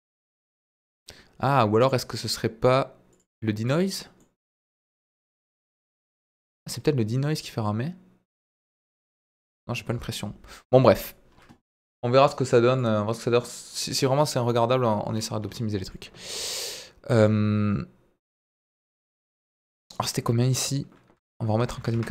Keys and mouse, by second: 3.1 click, 3.6 click, 4.1-10.0 middle drag, 11.1 click, 15.9 middle click, 18.6 click, 19.8-22.1 drag.